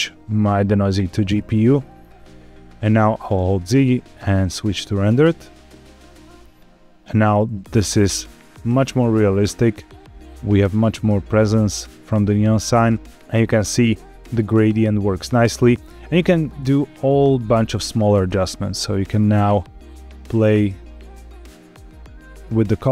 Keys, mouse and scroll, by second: 0.9 click, 0.9 right click, 1.7-2.3 scroll up 5, 3.3 z, 7.8-8.9 scroll down 2, 8.9-10.2 middle drag, 10.5-10.9 scroll up 2, 12.1 scroll down 2, 12.5 scroll up 2, 13.1 click, 14.6 scroll down 2, 16.4 click, 17.3-17.7 scroll up 2, 18.1-22.6 drag.